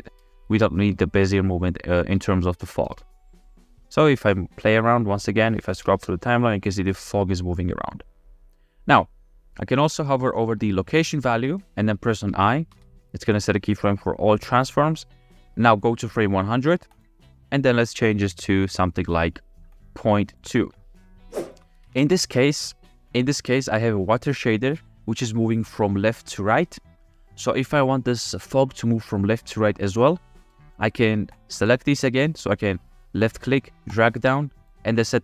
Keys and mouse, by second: 0.6 space, 1.5 click, 3.2 space, 6.0 space, 6.6 drag, 7.2-8.7 drag, 13.0 i, 17.3 click, 19.9-21.3 drag, 21.6 click, 31.4-33.7 drag.